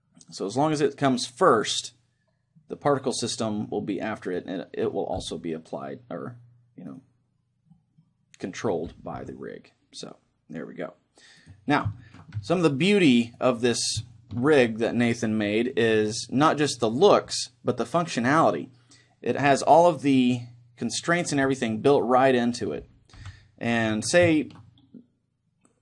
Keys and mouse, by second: 4.3-6.0 right drag, 4.7-6.5 middle drag, 5.2 r, 7.2-8.9 right drag, 7.7-8.7 drag, 8.7 middle click, 8.9 r, 11.6-13.2 right drag, 12.0-20.9 middle drag, 12.4 a, 13.4-15.7 right drag, 21.1-22.3 right drag, 21.3 g, 22.3-25.8 middle drag, 23.2 KP_1, 24.1 a.